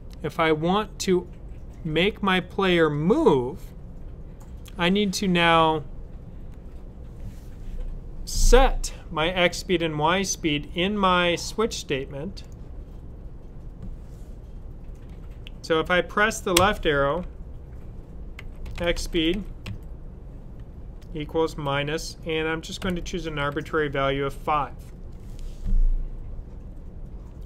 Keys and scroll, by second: 18.3-19.5 typing, 20.9-21.4 typing, 22.7-23.3 typing.